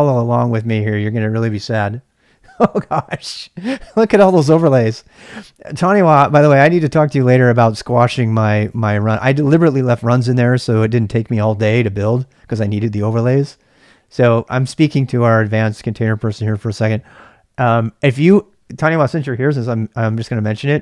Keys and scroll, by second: 0.0-0.3 typing.